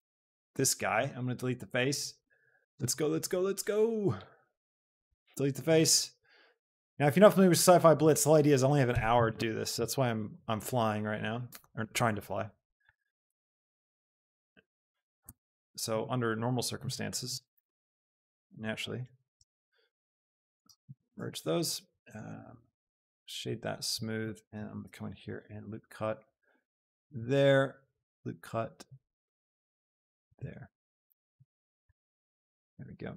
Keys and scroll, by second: 5.3 x, 9.0 alt+e, 9.3 Escape, 9.7 s, 13.0 Escape, 13.7 z, 15.2 e, 15.6 Escape, 15.9 s, 17.4 s, 17.8 Return, 18.5 a, 21.4 Tab, 24.4 ctrl+Tab, 25.5 ctrl+r, 30.2 Escape, 31.3 a.